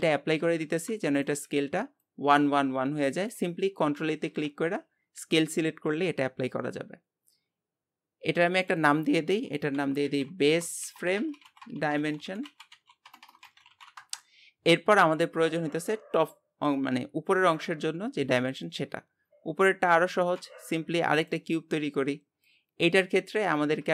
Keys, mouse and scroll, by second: 0.6 ctrl+a, 8.6-13.2 drag, 13.2 BackSpace, 13.3 BackSpace, 20.1 shift+a, 21.6 scroll down 1, 22.4-23.9 drag.